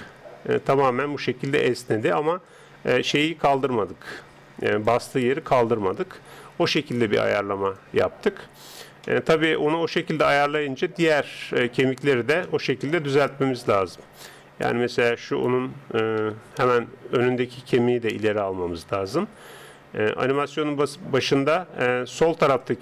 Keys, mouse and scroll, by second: 0.2-2.5 d, 0.6 click, 2.5 click, 4.9 d, 6.2 d, 6.2 n, 7.7-11.2 drag, 8.1 n, 11.2 middle click, 12.4-14.4 middle drag, 15.3 right click, 16.2 KP_3, 16.9 right click, 17.8 g.